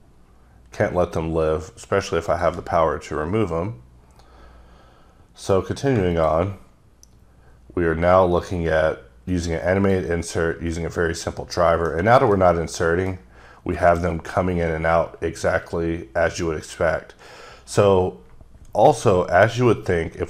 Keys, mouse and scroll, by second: 0.9 scroll up 2, 1.6 scroll up 1, 2.3 shift+click, 3.5-4.5 scroll down 10, 5.1 scroll down 3, 6.1 shift+click, 7.4-8.8 scroll down 10, 9.8 click, 11.3 middle click.